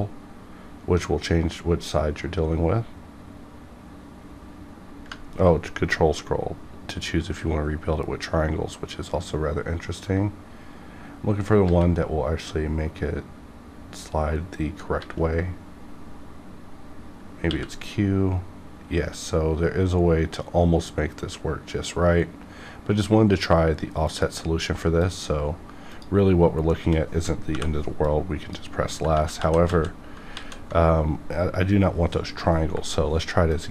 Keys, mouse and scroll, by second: 5.2 ctrl+Num_Lock, 5.2 scroll up 2, 7.7 ctrl+scroll up 1, 11.6 a, 15.9 a, 17.5 q, 24.1 click, 24.7 1, 24.9 click, 27.4 m, 28.0 click, 29.1 ctrl+z, 29.7 ctrl+z, 32.5 y, 33.4-33.7 drag.